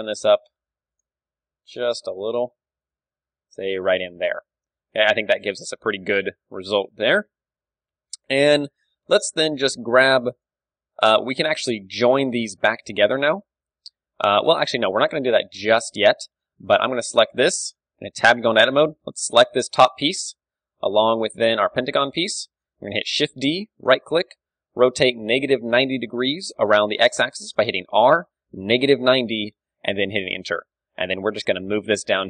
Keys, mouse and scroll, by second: 0.2 middle click, 1.0-3.0 right drag, 1.5 g, 3.0 Tab, 3.0-4.9 drag, 3.6 KP_3, 4.9 ctrl+w, 4.9-8.1 middle drag, 7.4 KP_3, 9.5 Tab, 9.7-12.5 middle drag, 10.2 Tab, 10.4-12.5 drag, 11.8-15.0 typing, 14.8-16.2 middle drag, 16.2 a, 17.1-18.5 drag, 18.1 Tab, 18.5 a, 18.8 a, 19.6 l, 21.8 l, 22.3-32.2 middle drag, 23.4 shift+d, 24.6 r, 30.6 g.